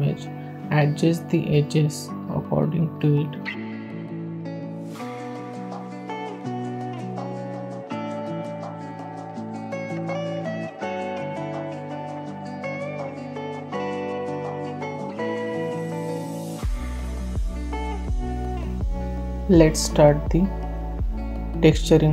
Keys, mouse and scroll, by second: 0.5 click, 1.4 click, 1.7 Tab, 2.1 click, 2.4 Tab, 2.9 click, 3.8 click, 3.8 s, 15.2 scroll down 1, 15.4 click, 16.2 s, 16.8 click, 18.6 click, 19.1-20.6 drag, 21.0-22.1 drag.